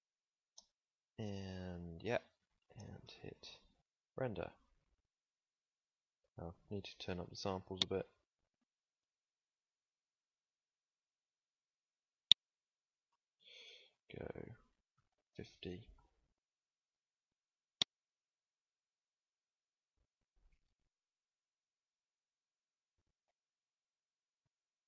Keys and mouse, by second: 6.4 Escape.